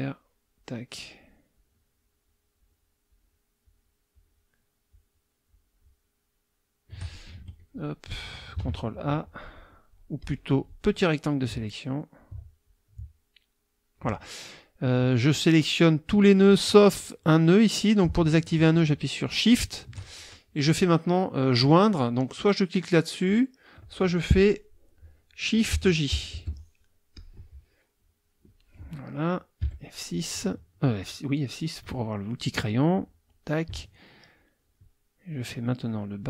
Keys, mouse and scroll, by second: 0.5-1.4 shift+drag, 1.5-2.4 shift+drag, 2.6-3.0 shift+drag, 3.1-3.5 shift+drag, 3.6-4.0 shift+drag, 4.1-4.5 shift+drag, 4.9-5.3 shift+drag, 5.5-5.9 shift+drag, 7.3 shift+F2, 7.7 shift+click, 8.6 ctrl+a, 9.3 click, 10.2 click, 11.5 alt+click, 12.6-14.1 alt+drag, 18.8 shift+click, 26.1 shift+j, 27.1 click, 29.6 F6, 32.4 click, 34.3 shift+click, 35.3 shift+click, 35.9 shift+click.